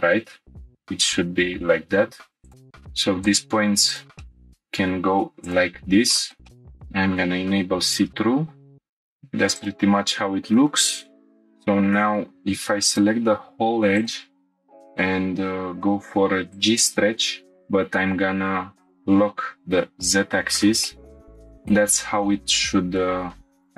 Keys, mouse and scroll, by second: 2.5 middle click, 2.5 shift+click, 2.5 g, 2.6 y, 3.9 click, 4.2 shift+middle click, 5.4 click, 6.1 shift+middle click, 6.4 shift+middle click, 6.5-7.5 scroll up 5, 8.1 scroll down 1, 8.9 scroll down 1, 11.1 click, 11.1 shift+middle click, 12.1 2, 12.9 click, 13.9 ctrl+click, 14.5 shift+middle click, 14.5 scroll down 1, 18.8-21.7 drag, 20.8 middle click, 22.0 scroll up 2.